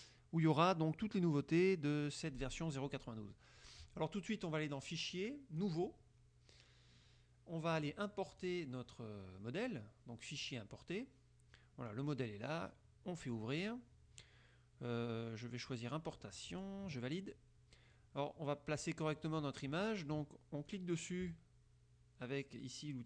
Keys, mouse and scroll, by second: 5.0 click, 5.7 click, 8.5 click, 10.5 click, 12.1 click, 13.3 click, 16.7 click, 20.8 click.